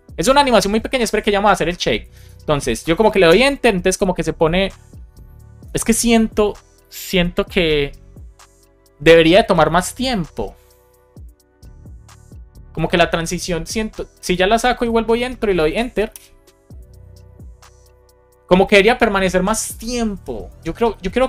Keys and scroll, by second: 3.2 Return, 16.0 Return.